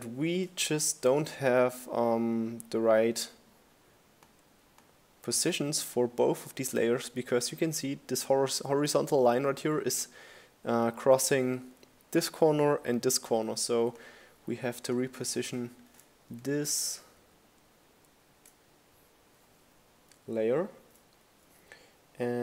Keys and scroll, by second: 12.6 shift+Down.